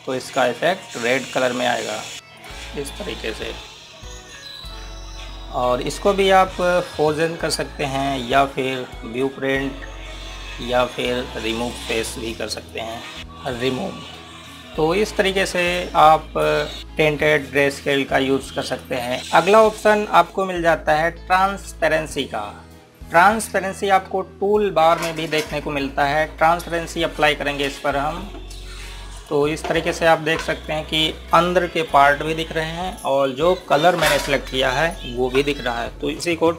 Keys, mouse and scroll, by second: 3.9 scroll down 1, 5.0 click, 5.9 scroll up 1, 7.0 click, 14.2 click, 15.6-16.8 scroll down 1, 19.2 click, 24.5 click, 27.6 click.